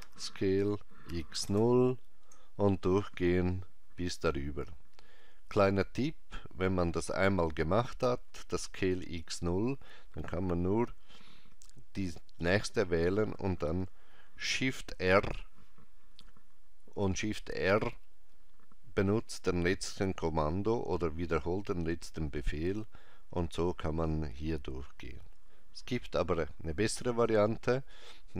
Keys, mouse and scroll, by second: 0.0 s, 11.5 alt+click, 15.0 shift+r.